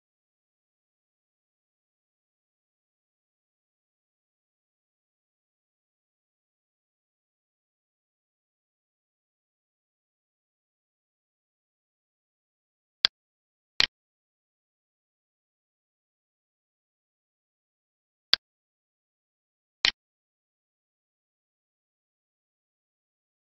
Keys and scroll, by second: 1.8 Right, 3.9 ctrl+Left, 5.7 space, 6.5 Down, 7.5 space, 8.3 ctrl+Right, 8.9 Right, 11.1 ctrl+s.